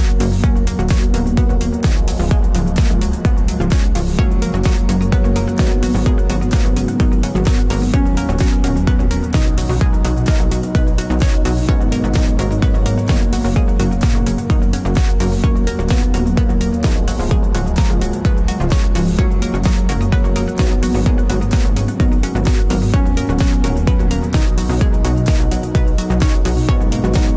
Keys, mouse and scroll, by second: 7.4 click, 7.5 click, 7.7 click, 8.4 s, 10.3 scroll up 1, 10.5 shift+middle click, 10.7 g, 11.3 click, 11.8-16.0 middle drag, 12.4-13.4 scroll, 14.5 shift+Tab, 15.0 g, 16.0 click, 16.0-17.6 middle drag, 16.4 scroll down 1, 17.7 middle click, 19.0-20.9 drag, 19.0-20.9 shift+middle drag, 19.9 r, 20.9 alt+d, 21.4 click, 21.6 x, 21.9 click, 22.1 shift+], 22.8 alt+d, 24.5-27.3 shift+middle drag, 24.6 scroll down 2.